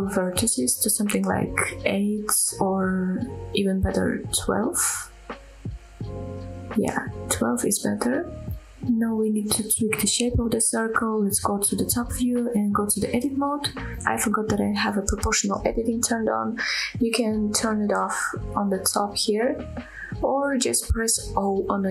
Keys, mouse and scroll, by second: 5.2-7.3 drag, 8.9 scroll down 1, 9.3-9.7 middle drag, 9.8 scroll up 1, 10.1-10.5 shift+middle drag, 10.9 KP_7, 11.3-11.8 scroll up 1, 11.8 Tab, 13.2 scroll down 1, 13.8 shift+middle click, 14.5 s, 15.1 y, 17.0 right click, 17.5 o, 18.8 o, 20.5 click, 21.0 click, 21.4 click, 21.8 click.